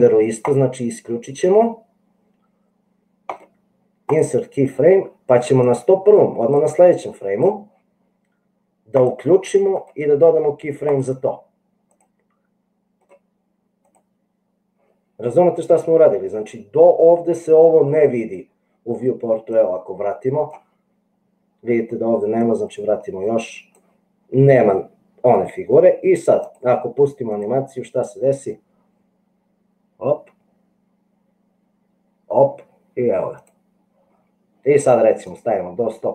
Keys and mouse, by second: 3.4-4.5 right drag, 5.7-7.5 drag, 10.0-11.2 right drag, 13.2 right click, 19.6-20.8 drag, 22.8-23.9 drag, 26.5 click, 27.3 click, 33.4 click, 35.5-36.1 drag.